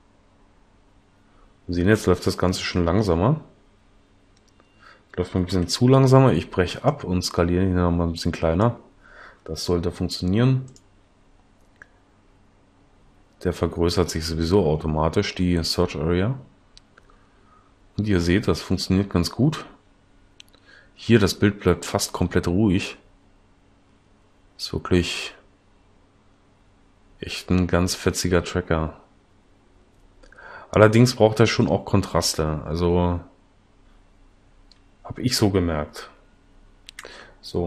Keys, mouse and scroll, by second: 5.6 Escape, 37.0 Escape.